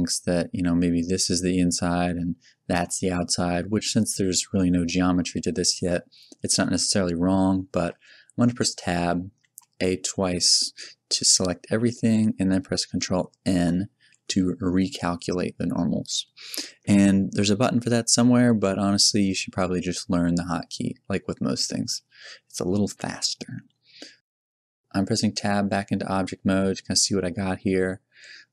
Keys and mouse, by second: 2.1-5.4 middle drag, 7.7 Tab, 8.9 a, 9.3 a, 13.3 ctrl+n, 21.9 Tab.